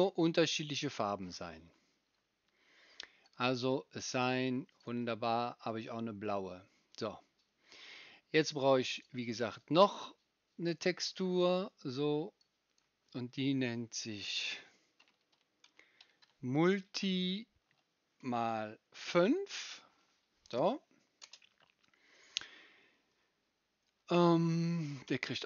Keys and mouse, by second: 3.3-4.8 middle drag, 4.8-9.0 right drag, 9.0-25.4 middle drag.